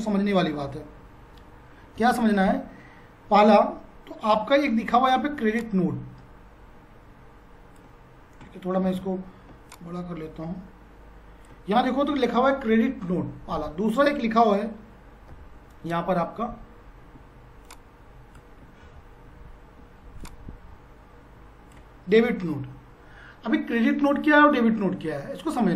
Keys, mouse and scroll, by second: 2.0 F5, 5.6 ctrl+click, 8.8 ctrl+z, 9.7 ctrl+click, 14.0 F5, 15.3 b, 17.6 F5, 17.7 shift+click, 18.7 F5, 18.8 z, 20.2-24.4 ctrl+drag, 24.2 F5.